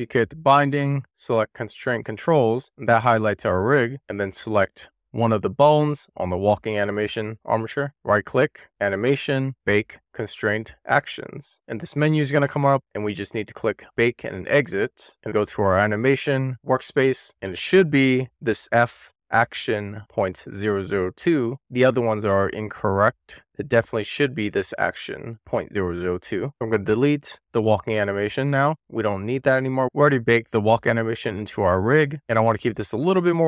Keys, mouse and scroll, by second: 2.9-3.8 scroll up 2, 3.8-4.5 scroll up 2, 5.6 click, 8.3-14.4 right drag, 14.4 click, 15.6 click, 18.4-23.8 drag, 26.4 click, 28.3 click, 28.8 click, 29.6 click, 30.4 click, 31.4 click, 32.6 x.